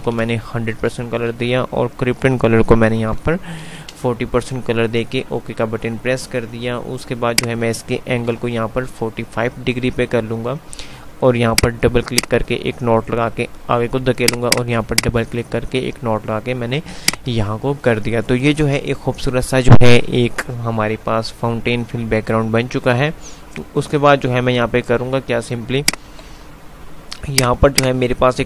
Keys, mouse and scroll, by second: 19.7 F5, 26.1 click, 26.4 F3, 27.6-28.4 drag.